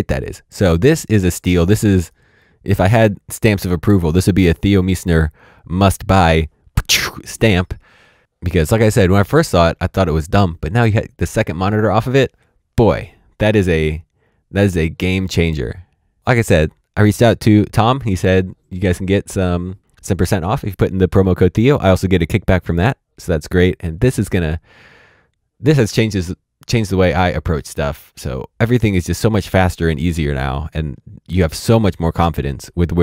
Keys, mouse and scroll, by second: 4.0 middle click.